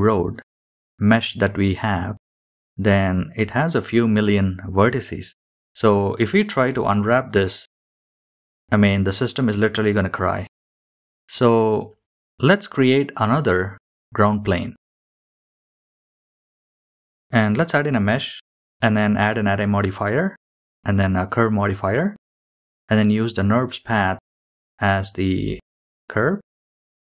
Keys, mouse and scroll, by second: 0.6 click, 3.9-4.2 scroll down 6, 4.3 shift+middle click, 4.8 click, 5.7 scroll down 4, 6.1 shift+middle click, 6.6 scroll down 2, 6.8 shift+middle click, 8.0-9.8 drag, 10.3 shift+a, 11.8-12.2 scroll up 3, 12.3 shift+middle drag, 12.7-13.4 scroll up 3, 13.4 s, 15.5-16.0 scroll down 2, 16.1 shift+middle drag, 16.6 click, 17.0-17.9 drag, 18.2-18.6 drag, 19.2 click, 21.2 click, 22.9 click, 24.2-24.7 drag, 24.9-25.4 scroll down 4, 25.4 click, 26.3-26.7 scroll down 4.